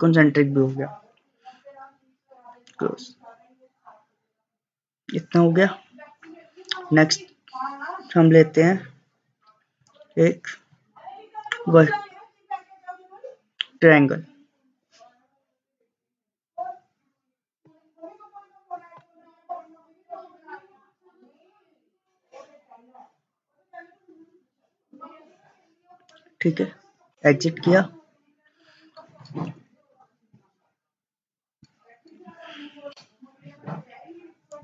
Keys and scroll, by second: 27.1 Escape.